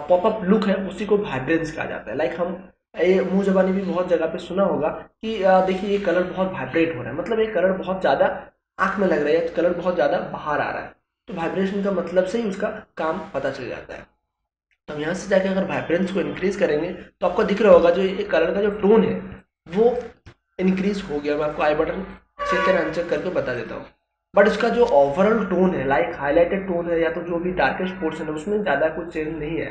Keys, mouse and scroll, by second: 15.2-17.7 drag, 17.7 space, 18.1-21.5 ctrl+drag.